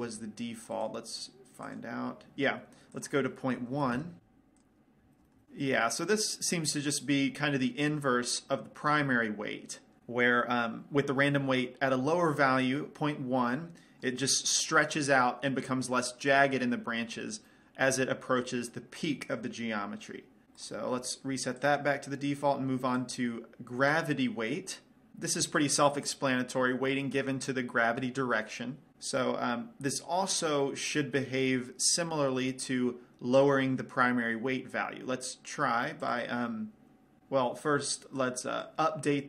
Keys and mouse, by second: 1.2-3.4 right drag, 3.4-4.7 drag, 4.9 click, 5.5-11.7 middle drag, 14.0-17.0 middle drag, 17.9 middle click, 21.1-22.8 right drag, 23.4-25.1 drag, 36.5-39.2 drag.